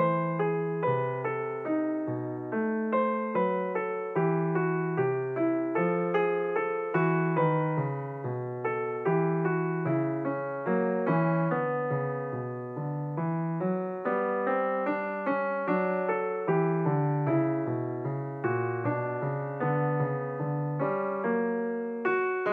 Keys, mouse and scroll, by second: 2.2 Tab, 3.2 click, 4.1 click, 5.6 ctrl+r, 10.2 click, 11.8 ctrl+r, 15.9 alt+click, 17.3 e, 19.0 s, 21.4 KP_1.